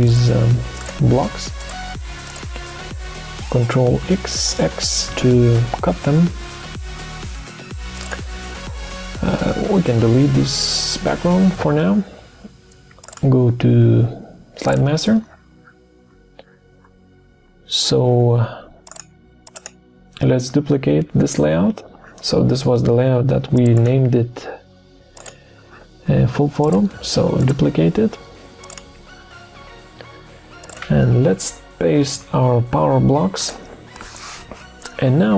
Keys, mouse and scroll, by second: 0.1 shift+click, 0.2 shift+double click, 0.8 shift+click, 1.6 shift+click, 2.3 shift+click, 5.1 ctrl+x, 9.8 Delete, 32.1 ctrl+v.